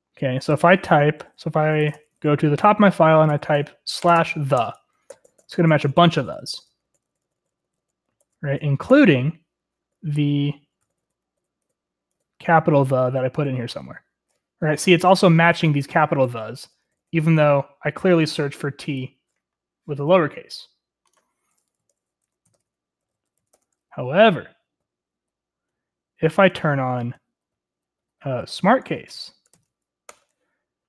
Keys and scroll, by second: 0.0-0.8 typing, 1.9-14.5 typing, 19.2-19.9 typing, 21.8 ctrl+c, 22.2 Escape, 22.3-24.5 typing, 25.9-29.4 typing, 30.1 ctrl+r, 30.1 ctrl+l, 30.4 Return, 30.5-30.8 typing.